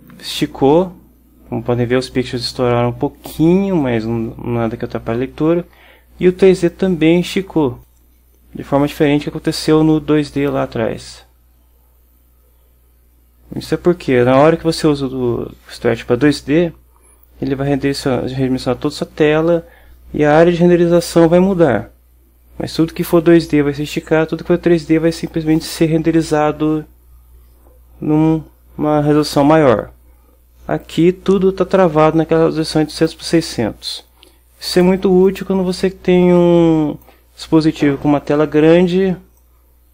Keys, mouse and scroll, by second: 6.8-8.1 drag, 10.6-14.0 drag, 33.2-35.1 drag, 35.3-37.9 drag, 39.5-39.9 drag.